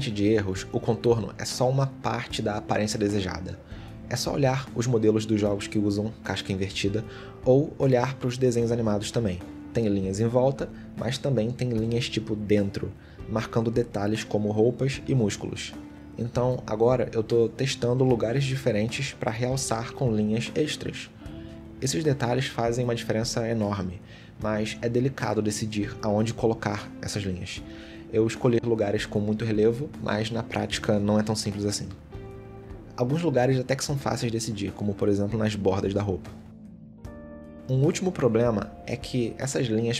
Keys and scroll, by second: 1.5 shift+x, 2.6 shift+x, 3.4 shift+x, 6.4 shift+x, 8.4 ctrl+z, 9.2 shift+x, 10.2 shift+x, 13.0 shift+x, 15.8 ctrl+z, 16.6 ctrl+z, 17.8 shift+x, 18.5 shift+x, 19.7 shift+x, 23.3 ctrl+z, 24.4 shift+x, 25.9 shift+x, 27.9 shift+x, 28.7 ctrl+z, 28.9 shift+x, 29.6 shift+x, 30.6 ctrl+z, 31.8 ctrl+z, 33.7 shift+x.